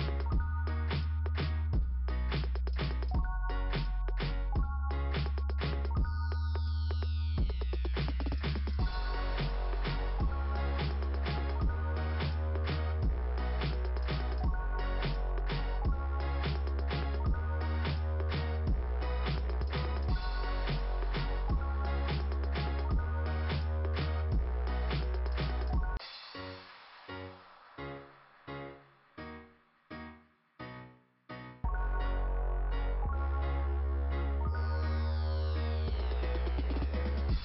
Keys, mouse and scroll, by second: 1.2 click, 2.8 click, 3.1 click, 3.4 click, 4.9 click, 5.1 click, 6.3 click, 7.3 click, 7.4 click, 9.4 click, 9.6 click, 10.8 click, 11.9 click, 12.0 click, 13.1 click, 14.5 click, 15.8 click, 17.2 click, 17.3 click, 20.9 click, 22.8 click, 22.9 click, 24.1 click, 25.5 scroll up 2, 27.7 scroll down 2, 34.2 click, 34.3 click, 35.0 click, 36.1 click, 36.9 click, 37.0 click.